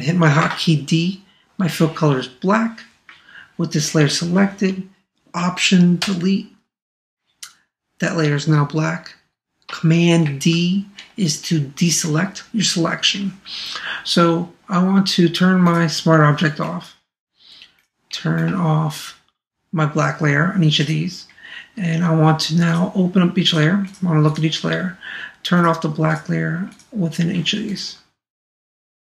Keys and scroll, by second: 6.0 alt+BackSpace, 10.2 super+d.